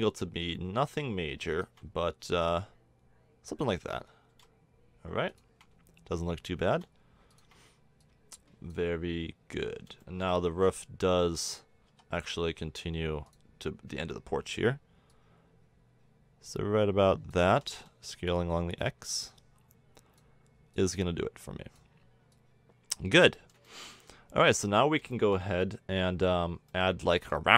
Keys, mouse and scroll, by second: 2.2 click, 4.3 r, 6.7 r, 8.0-10.0 drag, 10.5 Tab, 11.2 Tab, 11.9 s, 15.4-16.9 drag, 17.5 s, 18.8-20.7 drag, 21.0-23.5 drag, 27.0-27.5 middle drag.